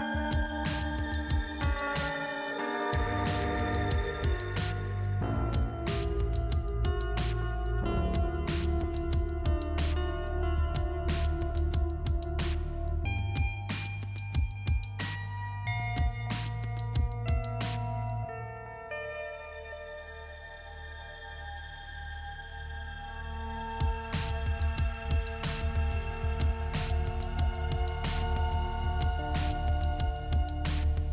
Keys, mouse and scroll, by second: 1.0 click, 5.2 scroll up 2, 6.6 click, 8.4 click, 10.8 click, 11.6 click, 12.8 click, 16.1 click, 18.5 click, 21.6 click, 22.7 click, 24.2 click, 27.5 click, 29.2 click, 30.0 click.